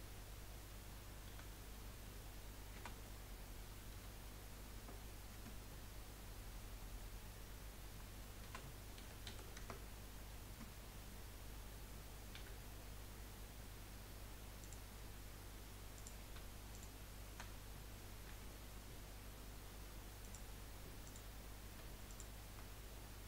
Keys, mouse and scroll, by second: 1.3 a, 2.8 r, 8.4 r, 12.4 g, 15.9 click, 16.7 shift+click, 18.3 g, 21.0 click, 22.0 shift+click.